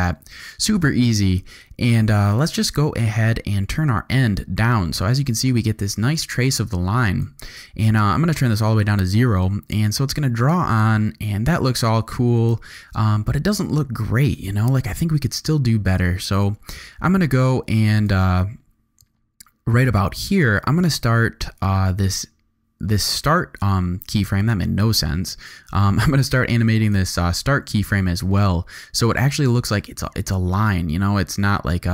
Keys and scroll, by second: 9.3 space, 12.8 space, 29.6 space.